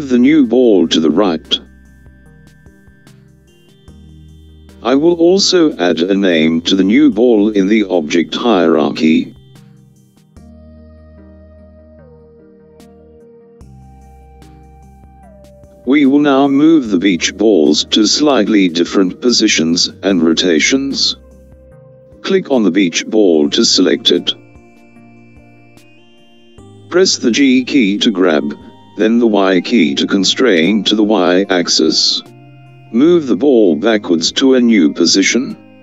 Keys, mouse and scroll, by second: 6.2 click, 6.5-9.8 drag, 9.8 BackSpace, 9.9 BackSpace, 22.4 click, 28.6 g.